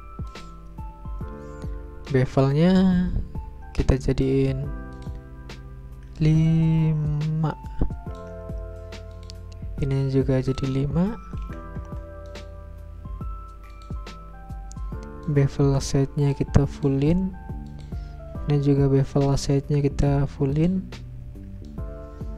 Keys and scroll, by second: 11.4 5, 14.4 Return.